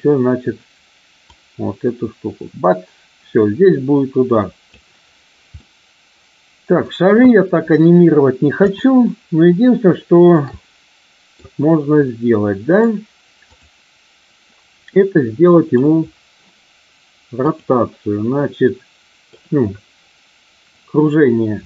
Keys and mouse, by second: 1.3-4.8 drag, 5.4-6.7 middle drag, 8.5 KP_7, 9.9 shift+middle click, 10.7 middle click, 12.0 middle click, 13.4 click, 15.0 middle click, 17.4 click, 18.5 middle click.